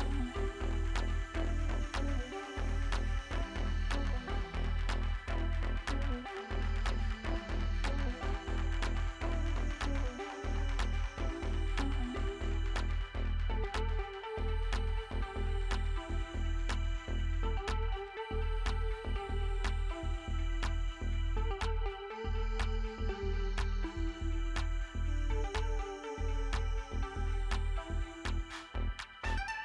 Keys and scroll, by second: 10.6 ctrl+0, 15.1 ctrl+space, 17.6 space.